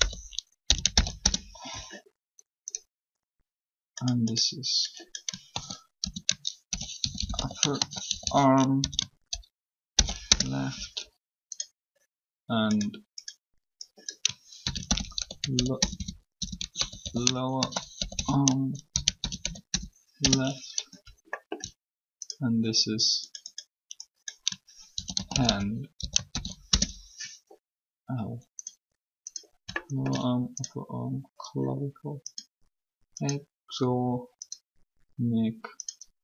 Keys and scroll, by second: 0.0-1.1 typing, 1.1 Return, 5.4-8.7 typing, 9.9 shift+l, 10.2 Return, 14.4-19.6 typing, 20.1 Return, 24.5-26.8 typing.